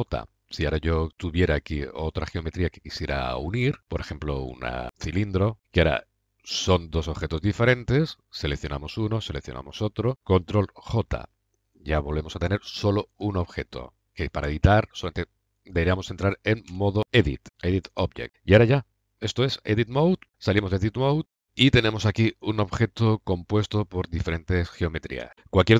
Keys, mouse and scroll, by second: 1.1-4.9 drag, 2.7-4.8 middle drag, 2.9 right click, 6.9 middle drag, 7.3 middle click, 7.6 middle click, 7.8-8.8 middle drag, 10.8 ctrl+j, 13.5 a, 14.6 a, 16.6 Tab, 20.2 Tab, 21.3-21.9 middle drag, 22.2 middle click, 23.6-25.3 drag.